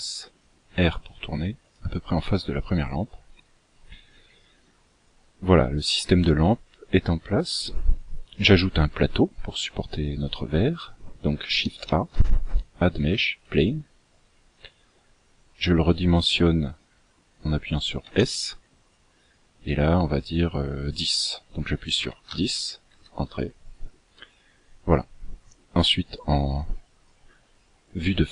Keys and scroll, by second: 11.9 shift+a, 18.2 s.